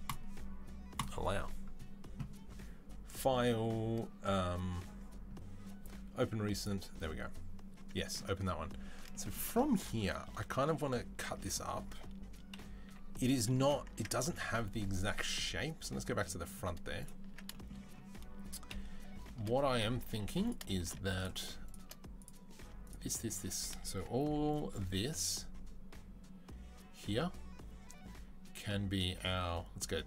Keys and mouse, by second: 0.8 click, 3.0-16.9 drag, 12.4 KP_3, 12.7 z, 13.7 Tab, 14.1 Tab, 16.9-18.5 middle drag, 17.1 Tab, 18.5 KP_3, 20.0 3, 20.3 click, 21.5 shift+click, 22.5 shift+middle click, 22.6 click, 22.7 middle click, 22.9 click, 22.9-30.0 shift+middle drag, 24.2 c.